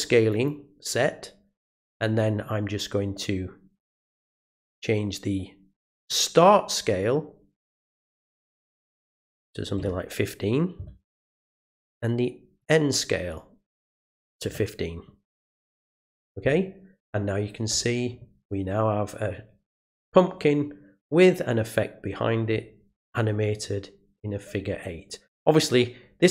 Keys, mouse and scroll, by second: 0.3 click, 3.8 click, 6.0 click, 7.8 click, 12.6 click, 13.3 click.